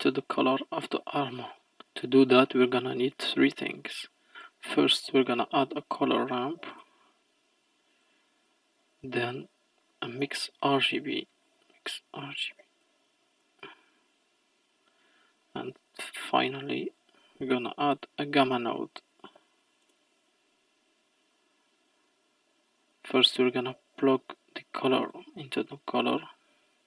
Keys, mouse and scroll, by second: 0.6 middle click, 1.3 click, 3.7 shift+a, 8.4 click, 8.8 middle click, 9.4 click, 9.9 shift+a, 15.0 middle click, 15.7 click, 16.5 shift+a, 22.9 click, 25.8-26.8 middle drag.